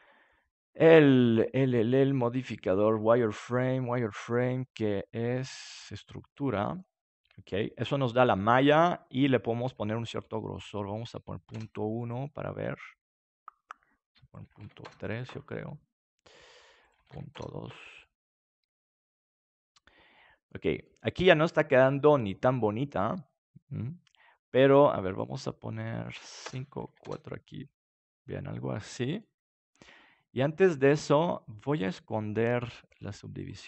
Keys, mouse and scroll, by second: 6.7-11.5 middle drag, 10.0-12.2 drag, 12.2-14.0 middle drag, 14.2-16.2 drag, 16.8-18.7 drag, 16.8-18.7 right drag, 18.7-20.2 middle drag, 20.8-22.5 middle drag, 25.1-28.7 drag, 27.7 middle click, 28.7-31.4 middle drag, 32.9-33.6 drag.